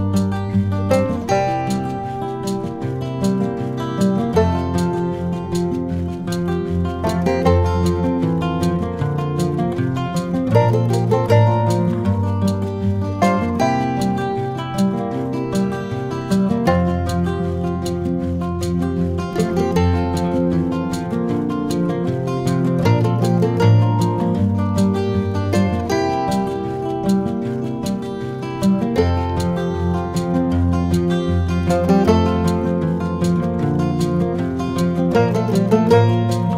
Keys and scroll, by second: 7.7 -, 10.9 v, 16.3 super+c, 16.6 super+v, 18.9 super+v.